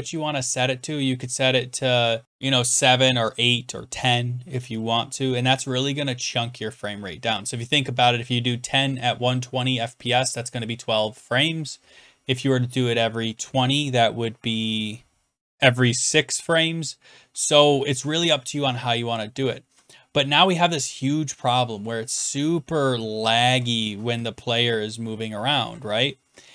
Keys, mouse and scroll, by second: 19.4-20.1 Right, 20.6-21.6 Left, 21.8 Right, 22.3 Right, 22.3 Right, 22.3 Right, 22.4 Down, 22.8-23.5 Left, 24.0 Left, 24.1 Left, 24.1 Left, 24.4 Right, 24.4 Up, 25.0-25.6 Right, 25.9 Down, 26.2 Left.